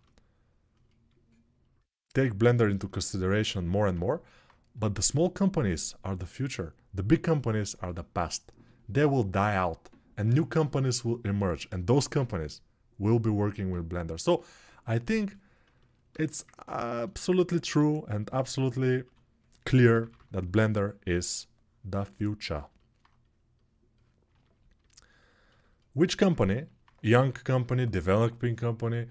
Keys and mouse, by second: 3.3 alt+q, 17.6 alt+q, 18.8 1, 19.6 p, 19.8 [, 19.9 [.